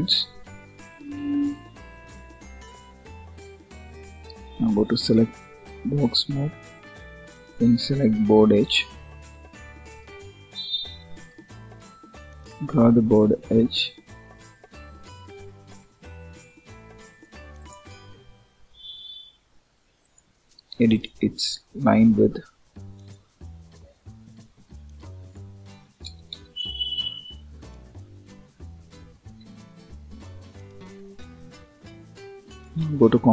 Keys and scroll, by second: 26.2 Return, 29.3 ctrl+s.